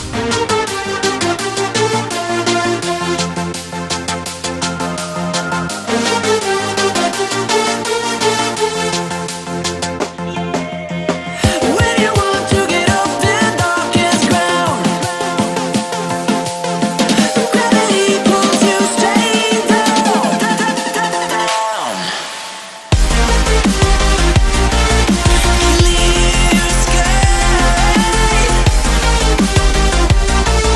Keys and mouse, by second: 0.2 shift+c, 1.0 c, 1.5 BackSpace, 1.8 c, 2.9 click, 4.5 click, 5.1-6.4 typing, 9.7-19.0 typing, 21.3-27.9 typing, 29.4 Right.